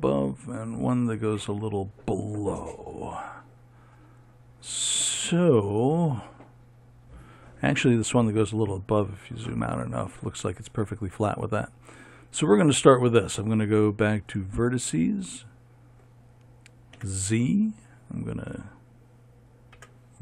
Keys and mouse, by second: 17.5 z.